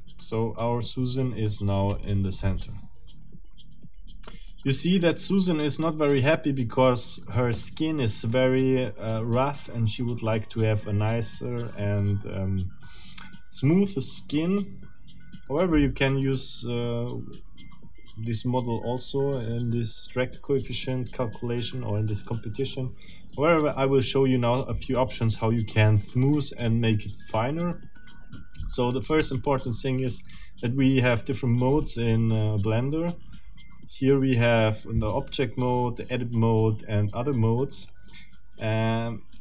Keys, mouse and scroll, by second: 1.4-2.1 scroll up 3, 2.4-4.2 middle drag, 4.3-6.6 middle drag, 6.6 scroll up 1, 7.6 middle click, 8.6-11.8 middle drag, 12.1-15.6 middle drag, 15.9-19.6 middle drag, 23.3-24.8 middle drag, 26.3-28.2 middle drag, 28.6-30.4 middle drag, 31.7 click, 34.4 click, 37.8 click.